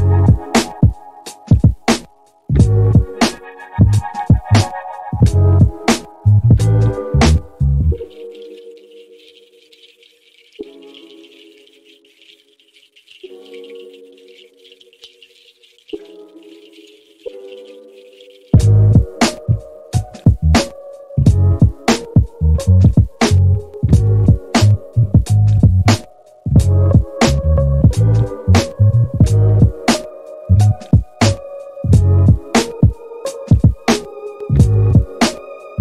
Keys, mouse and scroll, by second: 2.4-3.7 middle drag, 6.5 click, 11.8 click, 15.1 click, 19.1 shift+s, 25.9-30.5 right drag, 33.7 click, 34.3-35.8 drag.